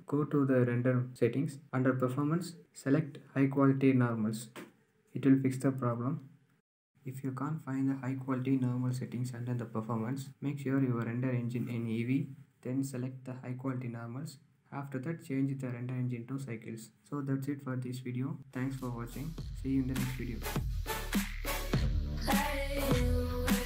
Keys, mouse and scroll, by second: 0.5-5.5 middle drag, 5.5 click, 6.2 KP_0, 6.8 click, 9.1 click, 9.9-10.5 scroll down 3, 10.5-11.1 drag, 11.1-11.9 scroll down 4, 11.9-12.4 scroll down 3, 12.4-14.1 scroll down 3.